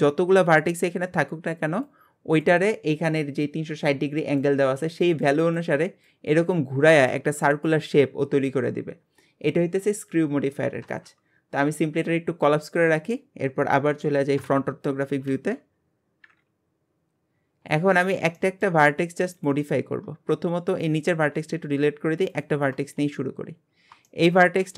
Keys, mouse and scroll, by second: 12.4-14.4 drag, 14.4 KP_1, 15.3 alt+z, 16.4-17.6 scroll down 2, 17.6-18.4 scroll up 4, 18.4 shift+middle click, 19.3 click, 20.1 scroll down 2, 20.7 click, 21.2 x, 22.3 click, 23.2-24.1 scroll down 3, 24.1 shift+middle click, 24.6 g.